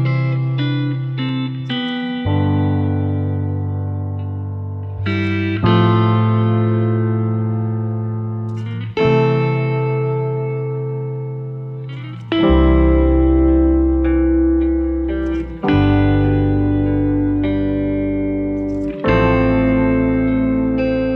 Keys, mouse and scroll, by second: 0.0 scroll up 1, 5.0-16.1 drag, 16.1 ctrl+z, 18.4-21.1 drag.